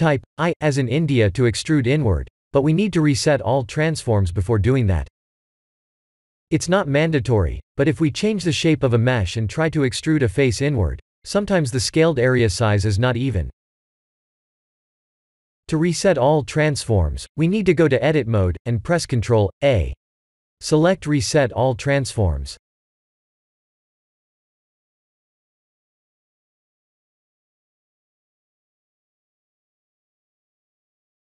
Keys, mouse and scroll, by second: 0.0 click, 1.3 KP_1, 1.3 KP_2, 1.3 KP_7, 3.9 scroll up 2, 4.2 shift+middle click, 14.4 ctrl+z, 15.5 Tab, 16.3 middle click, 17.5 ctrl+a, 21.6 Tab, 22.4 KP_1, 22.7 KP_7, 24.8 i.